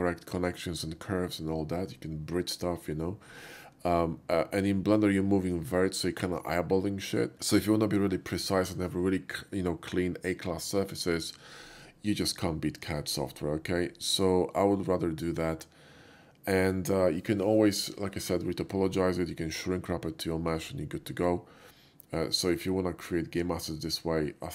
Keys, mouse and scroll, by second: 23.2-24.1 drag, 24.1-24.5 middle drag.